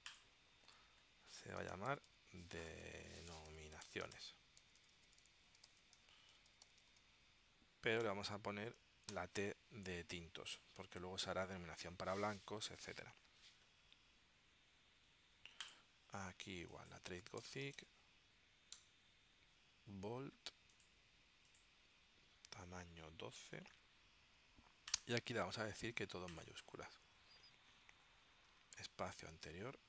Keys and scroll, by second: 1.5-8.2 typing, 9.2 shift+t, 17.2-18.4 typing, 18.8 Tab.